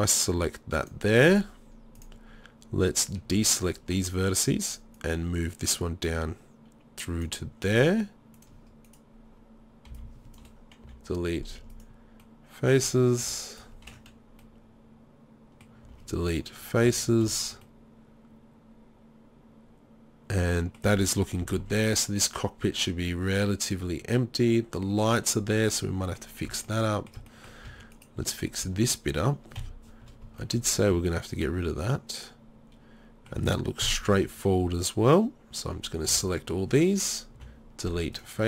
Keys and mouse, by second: 3.3 click, 3.3 b, 8.4 click, 9.9 b, 10.8 Delete, 12.9 z, 13.2 z, 15.8 Delete, 16.9 a, 19.0-20.0 middle drag, 21.4 z, 24.1 middle click, 25.3 middle click, 27.7 Tab, 28.0 click, 28.6 Tab, 29.6 KP_3, 30.0 z, 30.9 z, 33.8 KP_3, 34.1 z, 36.1 b, 37.4 Delete.